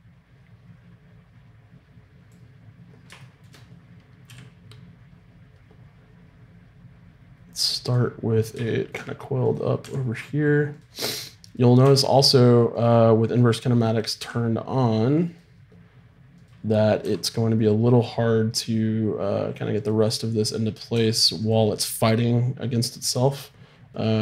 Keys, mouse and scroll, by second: 4.3 g, 9.4-10.6 drag, 9.4 right click, 9.8 r, 11.8 r, 14.2 r, 16.4-18.3 right drag, 17.0 r, 20.9 r, 23.9-24.2 right drag.